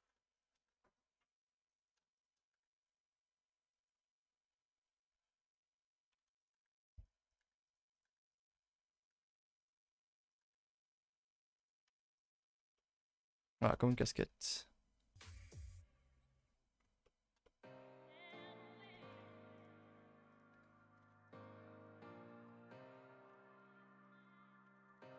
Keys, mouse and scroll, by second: 0.0 click, 0.3 click, 1.9 click, 2.2 click, 6.4 click, 7.3 click, 7.9 click, 8.9 click, 10.3 click, 12.8 middle click, 13.4-13.9 scroll up 7, 13.7 shift+middle click, 17.7-18.3 scroll up 3, 18.3 KP_0, 20.3 click, 21.2 click, 22.3 click.